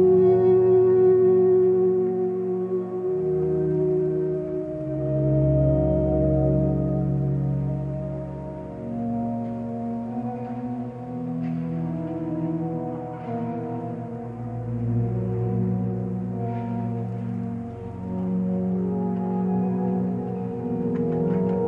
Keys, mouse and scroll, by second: 4.1 click, 8.7 ctrl+space.